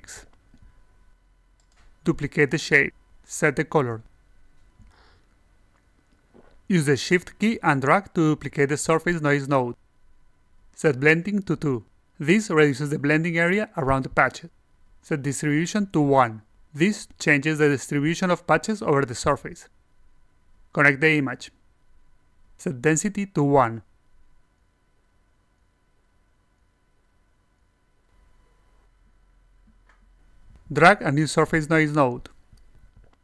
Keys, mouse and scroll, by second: 2.7 click, 4.5 click, 5.7-6.7 alt+drag, 7.2 click, 7.4 click, 7.7-10.4 shift+drag, 11.4 click, 15.8 click, 21.2-22.8 drag, 24.2-24.6 drag, 26.2 alt+click, 27.0 click, 27.3 click, 27.8 click, 28.3 click, 30.2 click, 32.2-33.2 drag.